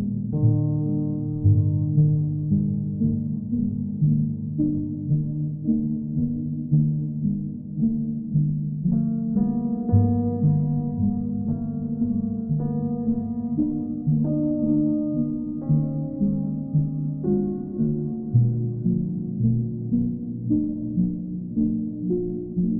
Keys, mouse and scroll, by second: 0.4 click, 0.7 shift+click, 1.0 shift+click, 1.7 alt+click, 3.3 click, 4.7 right click, 5.4 click, 5.9 click, 6.5 right click, 8.5 click, 11.4 right click, 13.6 click, 14.2 click, 19.0 click, 21.2 click.